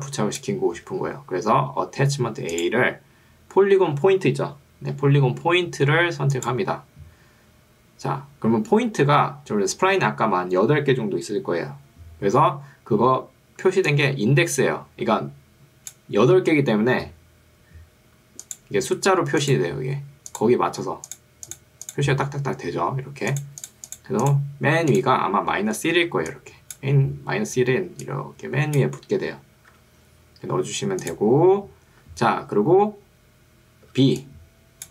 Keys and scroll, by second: 0.9 Escape, 16.3 Escape, 26.1 ctrl+2, 29.7 Escape, 34.1 ctrl+2.